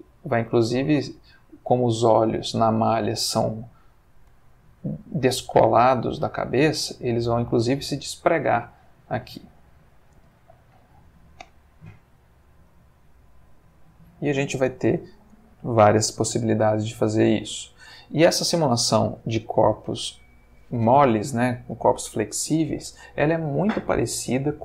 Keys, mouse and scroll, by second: 10.2 space, 17.6 Escape.